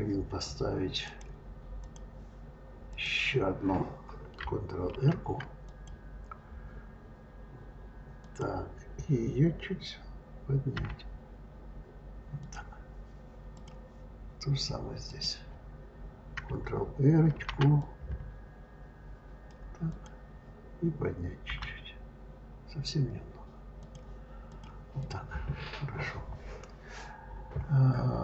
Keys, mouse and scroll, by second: 0.9-2.9 drag, 4.7 ctrl+r, 10.6 g, 13.4 click, 14.9 click, 17.2 ctrl+r, 21.3 g, 24.3 click, 24.9 click.